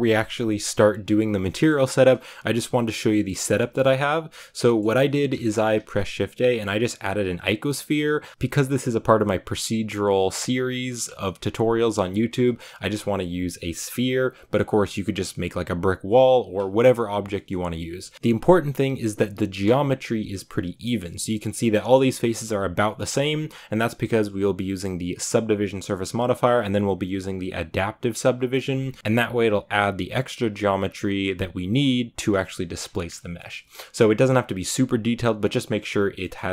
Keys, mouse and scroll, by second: 4.3 right click, 4.6 shift+middle drag, 4.7 scroll up 3, 4.8-12.4 middle drag, 12.4 scroll down 1, 12.6 middle click, 12.9 g, 17.2 middle click, 17.9 Tab, 18.1-21.0 shift+middle drag, 21.0-21.6 scroll up 1, 21.6-23.4 middle drag, 23.3 Tab, 26.0 scroll down 1, 33.0 scroll down 1, 33.2-33.5 middle drag, 33.5 Tab, 35.3-36.0 scroll up 1, 36.1 middle click.